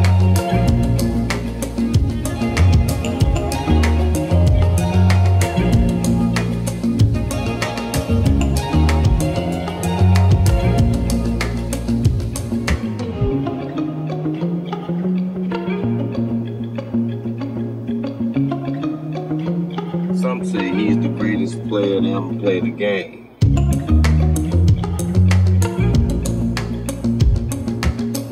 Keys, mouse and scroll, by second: 0.1 click, 0.3 click, 0.6 middle click, 1.5 middle click, 2.4 click, 2.8 shift+click, 4.1-4.6 drag, 5.1 g, 5.1 z, 7.4 click, 7.7 click, 8.7 click, 9.2 g, 9.4 g, 11.1 click, 11.5 g, 14.1 click, 15.1 click, 15.6 g, 16.7 click, 17.3-18.4 middle drag, 18.2 typing, 19.7 click, 20.2 g, 20.3 g, 20.9 Escape, 20.9 middle click, 21.6 shift+middle click, 22.9 shift+middle click, 24.7 middle click, 25.1-26.1 middle drag.